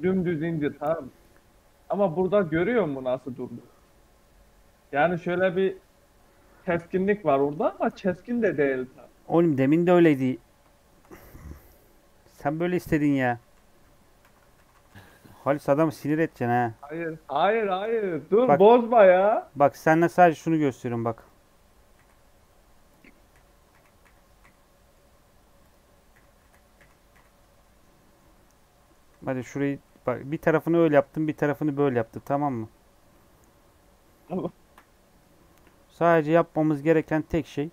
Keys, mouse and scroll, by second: 6.7 scroll down 1, 10.2-10.5 scroll down 4, 10.5 shift+middle click, 11.4 scroll up 3, 11.7 scroll down 2, 12.0 middle click, 12.6 ctrl+z, 12.8 ctrl+z, 16.5 ctrl+z, 16.8 ctrl+z, 17.0 ctrl+z, 17.2 ctrl+z, 18.3 ctrl+z, 18.5 ctrl+z, 19.0 middle click, 19.2-19.9 scroll up 2, 20.0 ctrl+z, 20.6 2, 21.1 click, 21.8 f, 22.8 click, 23.2 f, 23.6 f, 23.9 f, 24.3 f, 24.6 middle click, 25.5 click, 26.1 f, 26.4 f, 26.8 f, 27.1 f, 27.4 Tab, 27.6-29.1 middle drag, 29.1 Tab, 29.4 a, 29.7 m, 30.6 Tab, 30.9 middle click, 31.8 Tab, 32.0 3, 32.3-33.3 middle drag, 33.3 KP_3, 34.0 scroll up 1, 34.5 shift+middle click, 34.8 scroll up 1, 34.9 middle click, 35.3 3, 35.8-36.9 middle drag, 36.9 click.